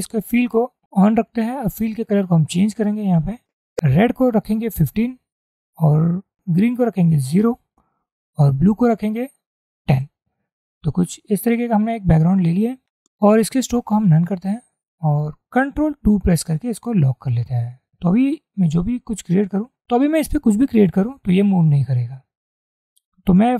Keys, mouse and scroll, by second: 4.9 1, 5.6 Tab, 7.5 0, 8.1 Tab, 9.9 1, 10.1 0, 11.2 Tab, 16.3 ctrl+2.